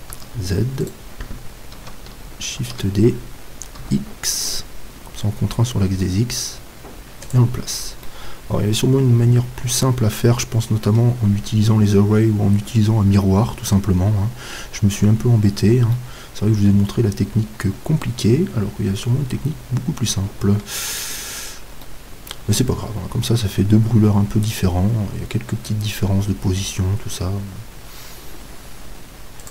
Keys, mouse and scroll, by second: 0.2 z, 0.8-2.7 right drag, 2.6 shift+d, 7.3-9.7 drag, 8.0-10.0 middle drag, 15.9-17.7 middle drag, 23.5-29.5 middle drag.